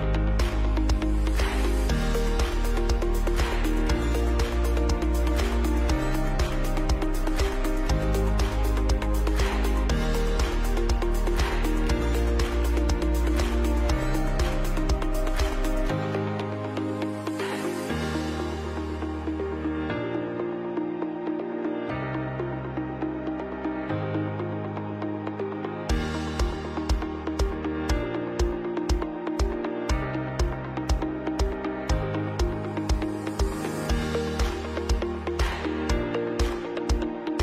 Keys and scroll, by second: 0.1 Delete, 3.0 ctrl+c, 3.3 ctrl+b, 4.7 Down, 4.8 Down, 5.0 Right, 5.2 Down, 5.3 Right, 5.6 Right, 10.3 ctrl+alt+KP_3, 12.7 Delete, 17.5 ctrl+KP_Subtract, 20.2 Delete, 20.8 Left, 21.4 Left, 22.0 Down, 22.0 Down, 22.1 Down, 22.2 Down, 22.3 Left, 22.3 Left, 25.9 space, 26.5 ctrl+alt+space, 29.4 Right, 29.5 Right, 29.6 Right, 29.7 Left, 30.2 Right, 30.3 Right, 30.3 Down, 31.0 Right, 31.1 Right, 31.2 Right, 31.2 Right, 31.7 Right, 36.8 Right.